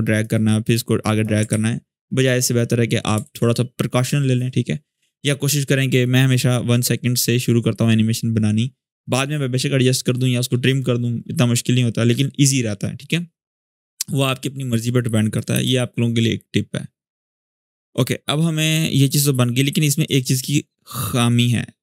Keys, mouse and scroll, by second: 1.2 ctrl+z, 3.0 ctrl+z, 14.5-15.1 click, 15.3 space, 17.5-20.9 drag.